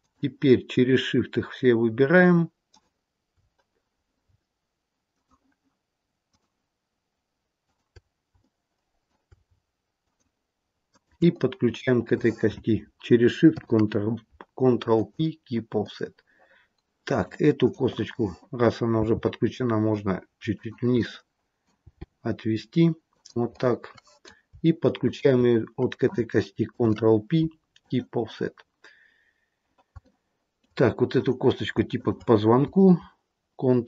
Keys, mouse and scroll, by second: 2.6 shift+click, 3.7-4.8 scroll up 3, 5.0 shift+click, 6.2 shift+click, 8.4 shift+middle click, 9.9 shift+click, 11.1 shift+click, 11.5-12.5 scroll down 1, 12.5-13.4 scroll down 2, 13.4 ctrl+p, 15.8 middle click, 17.5 click, 18.8 g, 20.9 middle click, 21.8 g, 23.5 middle click, 25.0 shift+click, 26.6 ctrl+p, 28.4-29.7 scroll down 1, 29.7 scroll down 2, 30.0 shift+middle click, 31.0 click, 31.9 shift+click.